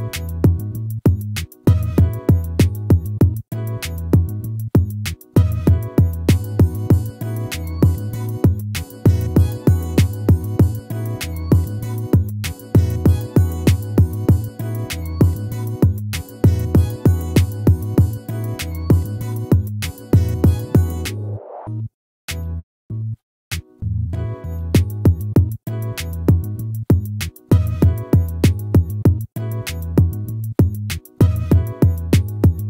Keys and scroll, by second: 0.2 ctrl++, 5.1 ctrl+-, 9.5 ctrl++.